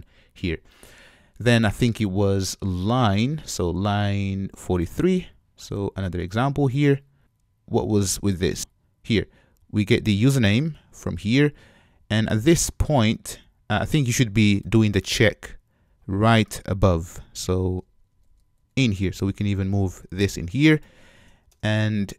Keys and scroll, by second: 17.8 alt+shift+Up.